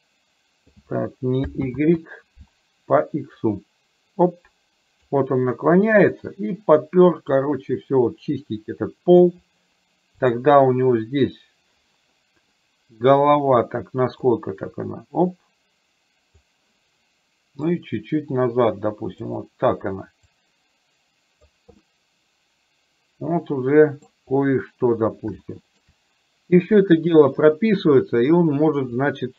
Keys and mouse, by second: 1.7 ctrl+z, 3.4-5.1 drag, 7.4-9.3 drag, 10.3 click, 14.4-16.6 drag, 17.8-19.3 drag, 20.3-21.6 drag, 21.9-24.2 middle drag, 25.6-25.9 shift+middle drag, 29.2 click.